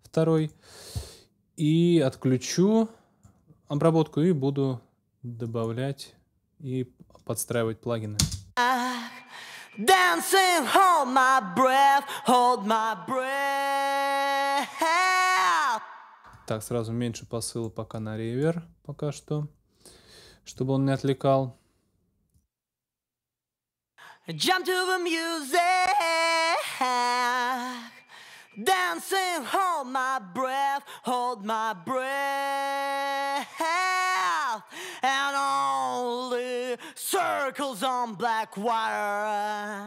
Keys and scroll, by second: 8.2 space, 15.5 space, 23.6 space, 39.6 space.